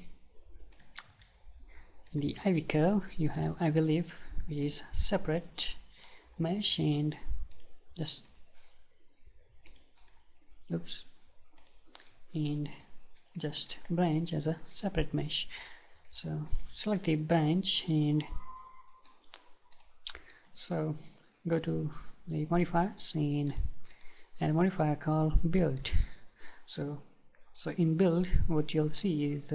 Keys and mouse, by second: 0.7-5.1 drag, 5.1-7.5 middle drag, 7.5-13.4 drag, 13.4-19.1 middle drag, 19.1 click, 19.7-22.5 drag, 23.5-25.9 drag.